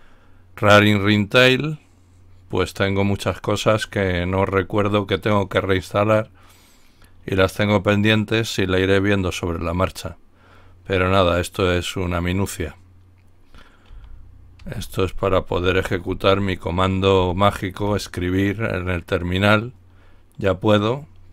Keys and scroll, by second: 13.9-17.1 typing, 17.8 Return.